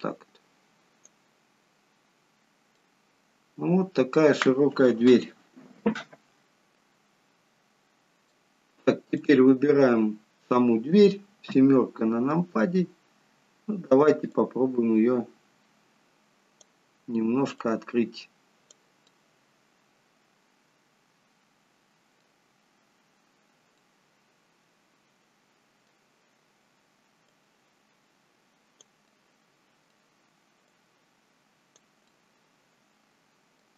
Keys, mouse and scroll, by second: 1.7-2.7 scroll down 6, 2.7 middle click, 6.4 shift+middle click, 9.1 click, 11.4 KP_7, 14.2 click, 17.5 click, 19.0 middle click, 23.7 middle click, 27.2 click, 29.0 middle click, 30.6 click, 32.0 middle click.